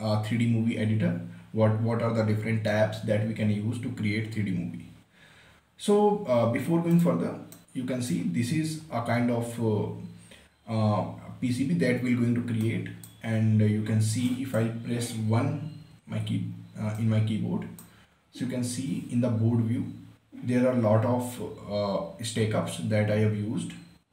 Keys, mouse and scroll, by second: 7.5 click, 8.2-11.0 right drag, 13.2-14.9 right drag, 16.4 1, 17.5-19.1 right drag, 19.1 scroll up 1, 19.6-21.5 scroll down 1.